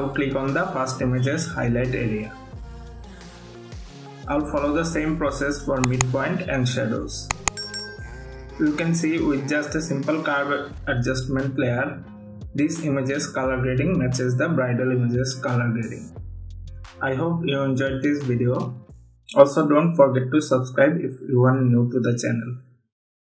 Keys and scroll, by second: 5.0 ctrl+-, 8.1 ctrl+-, 8.7 ctrl+=, 13.4 ctrl+t, 14.8 Return, 16.3 ctrl+-.